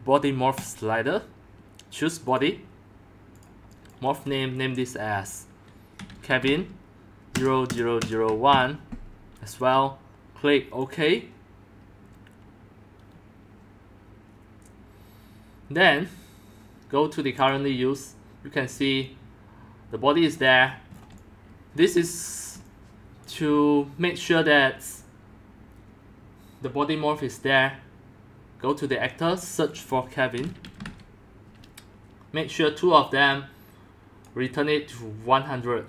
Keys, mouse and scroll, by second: 3.9-4.3 drag, 5.7-7.3 typing, 7.7 click, 8.5 typing, 10.9 click, 17.5 click, 20.6-21.1 scroll down 9, 21.0-23.6 typing, 21.8-22.5 drag, 28.7 click, 29.7 click, 30.1-31.3 typing, 32.4-32.7 drag, 33.3-34.2 drag, 35.1-35.8 drag.